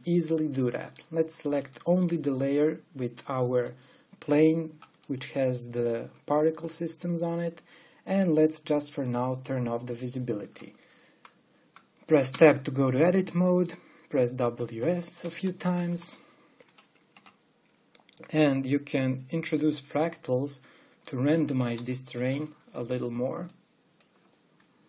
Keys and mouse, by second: 1.6-2.7 middle drag, 2.7 click, 3.1 middle click, 3.4 click, 3.5 middle click, 3.7 click, 11.1 click, 13.0 Tab, 15.1 w, 15.9 w, 16.7 w, 18.8 click, 20.2-22.2 drag, 22.3 w, 22.7 w, 24.3-24.8 drag.